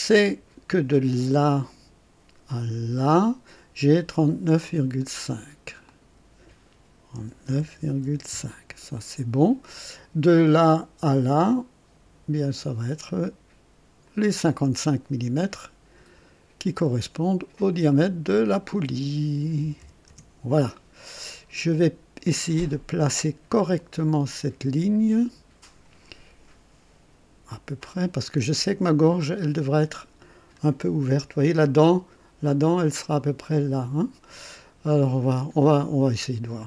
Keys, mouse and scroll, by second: 0.0 right click, 1.5 click, 2.9 click, 5.8 click, 7.1 KP_3, 7.4 KP_9, 7.7 KP_Decimal, 8.0 KP_5, 8.3 KP_Enter, 10.3 typing, 12.4 click, 14.0 click, 17.8 click, 19.6 KP_5, 20.0 KP_Enter, 21.4 scroll up 1, 21.8-22.5 right drag, 23.7-25.9 drag, 28.0-30.7 drag, 34.8-35.5 right drag.